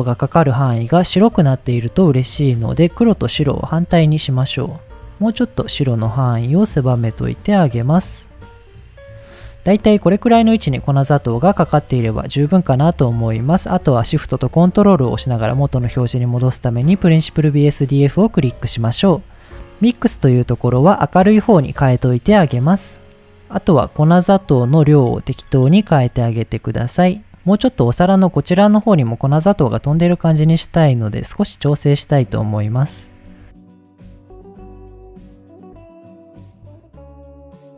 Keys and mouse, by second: 3.2-3.8 drag, 4.2 click, 4.9 click, 5.3 click, 6.0 click, 6.7 click, 7.7 click, 10.9 middle click, 11.8 middle click, 13.3 middle click, 17.4 middle click, 18.4 shift+middle click, 20.1-22.0 drag, 23.2 middle click, 24.3 middle click, 25.2 middle click, 26.2 click, 29.6 middle click, 30.4 middle click, 31.6-33.2 drag, 33.6 click, 34.2 click, 35.2 click, 36.5 shift+click, 37.3 click, 37.5 click.